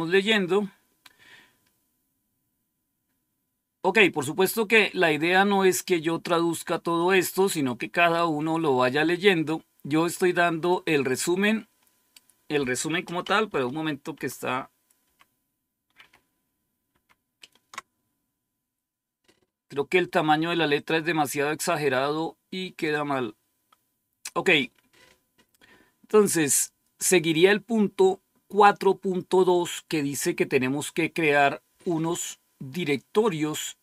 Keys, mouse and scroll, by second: 0.7-10.3 scroll down 1, 10.6 click, 13.4 ctrl+-, 14.0 ctrl+-, 14.9 ctrl+-, 15.9 ctrl+-, 17.0 ctrl+-, 20.7 click, 22.7 click.